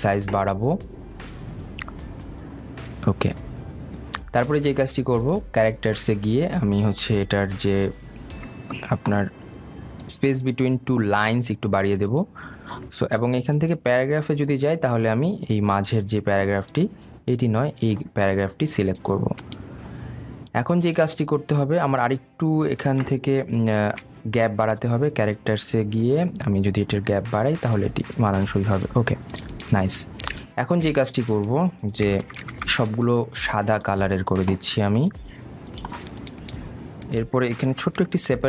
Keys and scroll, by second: 0.4 ctrl+a, 33.2 shift+Up.